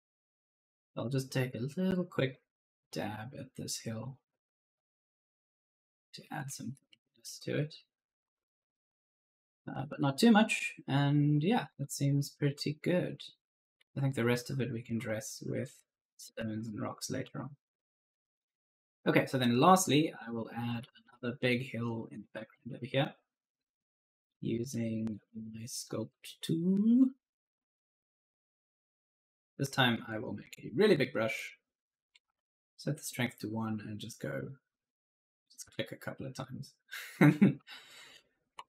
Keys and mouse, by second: 0.0-0.7 typing, 2.1 click, 3.8 click, 5.4-20.7 typing, 5.4 right click, 5.8 right click, 11.4 right click, 21.8-22.9 typing, 21.8 right click, 24.0 click, 24.4-25.7 typing, 24.6 right click, 25.2 right click, 29.9 click, 31.2 click, 32.1 1, 32.2 Return, 34.2 click, 35.9-38.6 typing, 36.0 right click.